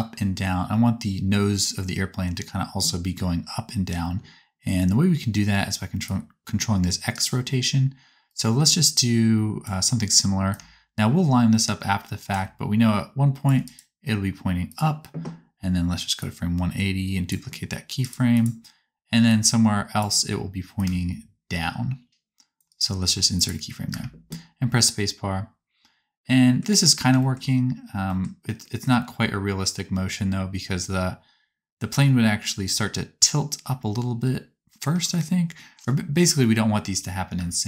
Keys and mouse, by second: 3.3 space, 8.2-13.5 drag, 13.5 right click, 23.8 space, 35.0-37.6 drag, 35.0-37.6 right drag, 37.3 space.